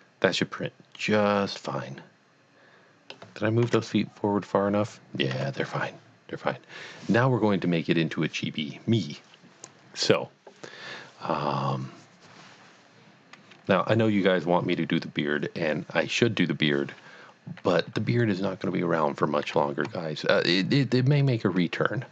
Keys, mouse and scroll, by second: 3.6 KP_3, 6.8-7.3 scroll up 1, 19.8-20.2 middle drag, 19.8-20.2 scroll up 1, 21.1 click.